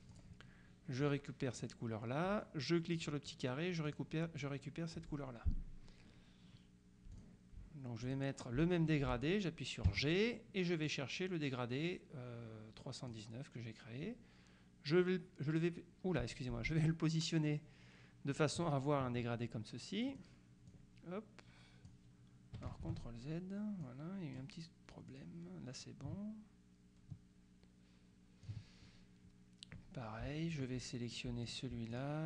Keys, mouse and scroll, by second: 0.2 click, 1.6 click, 3.0 click, 4.0 click, 7.2 click, 8.1 click, 10.0 g, 10.9-13.6 drag, 20.2 click, 22.9 ctrl+z, 23.9 click, 25.2-29.0 drag, 30.6 click, 31.6-32.2 shift+drag.